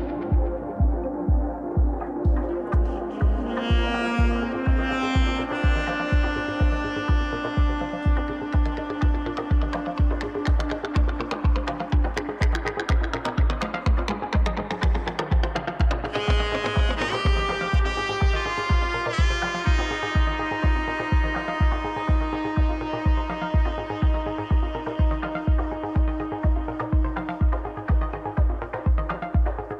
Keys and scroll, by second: 2.2-3.2 typing.